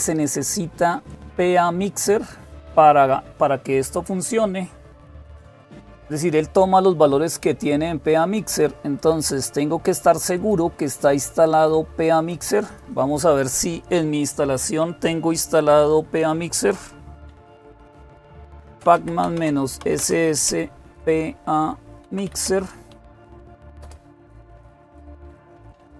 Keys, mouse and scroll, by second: 0.0-2.8 drag, 5.0-6.6 scroll down 2, 8.8-11.1 drag, 11.2-13.2 drag, 17.1-23.6 typing.